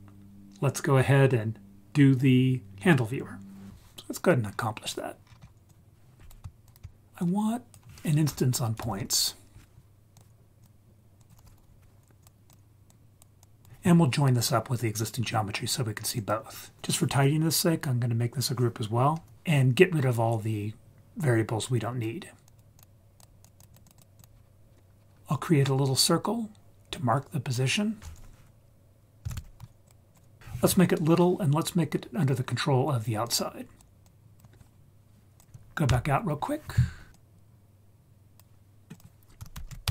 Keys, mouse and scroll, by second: 4.5-5.3 scroll down 2, 5.3 scroll down 1, 5.7-6.3 drag, 6.7 ctrl+right click, 7.3-10.2 drag, 11.2-12.3 drag, 12.9-13.2 drag, 13.4 click, 16.2 click, 22.5 click, 22.8 click, 23.4 click, 23.6 click, 23.7 click, 23.8 click, 24.0 click, 24.2 click, 26.9-29.9 drag, 30.4 ctrl+z, 33.3-33.8 drag, 34.0-34.4 drag, 35.4 click, 35.9 Tab, 37.1 scroll up 3, 37.1-38.5 drag, 38.9 click.